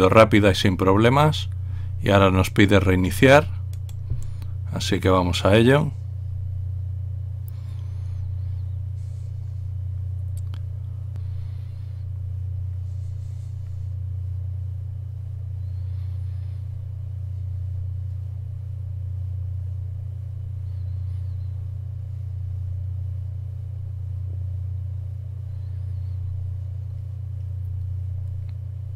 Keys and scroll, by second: 11.2 Return.